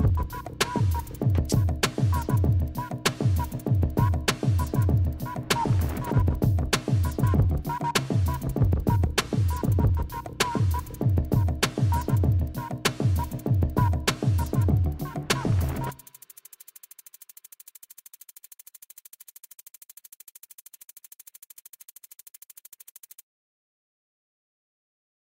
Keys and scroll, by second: 1.8 Delete, 3.0 Up, 3.5 Down, 13.0 Delete, 13.7 ctrl+z, 14.7 Delete, 15.3 Delete, 16.0 Delete, 16.8 Delete, 17.1 Delete, 23.3 ctrl+0.